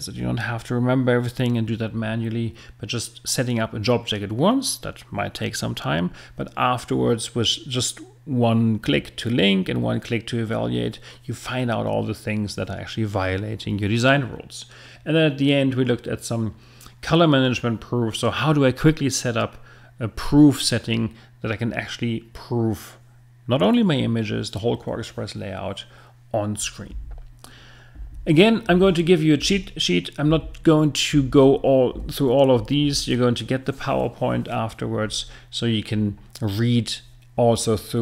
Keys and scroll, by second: 26.9 Right.